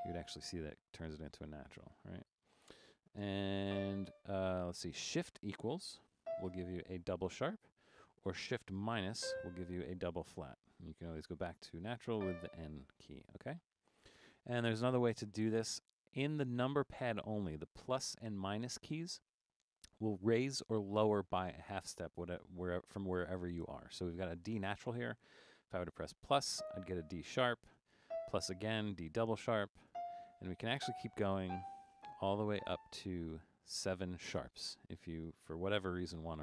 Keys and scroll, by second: 0.0 n, 3.7 d, 6.2 shift+=, 9.3 shift+-, 12.2 n, 28.1 typing, 30.8-33.4 typing.